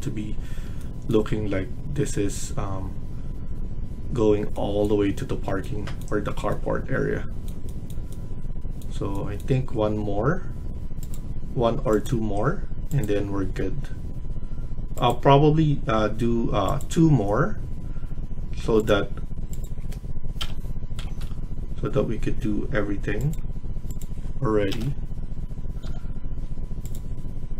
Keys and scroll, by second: 20.3-21.2 typing, 24.6 BackSpace, 25.8 typing.